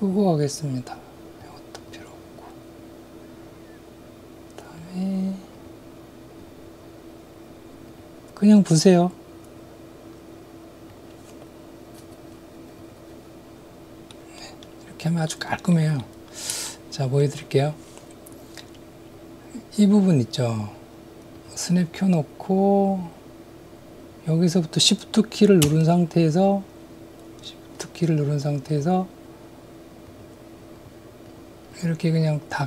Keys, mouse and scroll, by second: 4.8-13.3 drag, 14.2 middle click, 15.3 middle click, 16.0 middle click, 16.8 shift+middle click, 21.3 click, 22.9-32.6 drag.